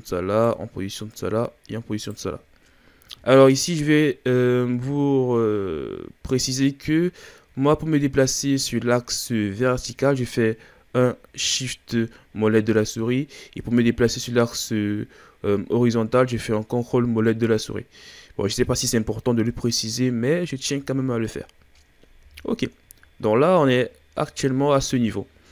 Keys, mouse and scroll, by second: 1.1 right click, 2.3-4.9 scroll down 7, 4.9-7.5 scroll up 3, 7.5-8.3 scroll down 3, 8.3 ctrl+scroll down 5, 11.6-12.1 shift+scroll up 5, 12.1 shift+scroll down 4, 12.3 shift+scroll up 5, 12.6-16.5 shift+scroll down 10, 16.5-16.8 ctrl+scroll up 5, 16.8 ctrl+scroll down 2, 17.0 ctrl+scroll up 1, 17.3-18.0 ctrl+scroll down 6, 18.0-21.4 scroll up 25, 21.4-21.8 ctrl+scroll up 1, 21.8-22.2 scroll down 5, 22.2 a, 22.9-24.2 shift+scroll up 5, 24.2-24.5 scroll up 1, 25.2-25.5 shift+scroll down 4.